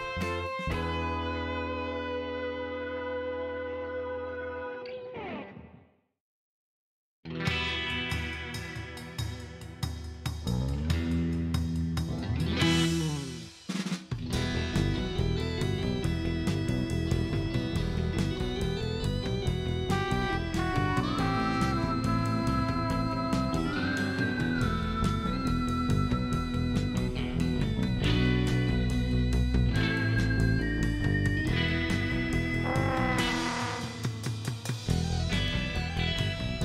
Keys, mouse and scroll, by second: 0.3 click, 1.1 KP_5, 1.5 KP_Enter, 3.4-5.7 drag, 6.6 click, 7.9 scroll up 1, 8.4-9.5 middle drag, 10.8 click, 13.1 click, 15.8 click, 16.5 click, 16.9 right click, 17.6 click, 19.7 click, 20.4-21.3 typing, 22.6 Return, 24.9-27.2 drag, 27.5 scroll down 2, 27.8 middle click, 30.4 click, 31.4 middle click, 31.8 scroll up 2, 32.2 middle click, 33.8 click, 34.3 click, 36.2 click.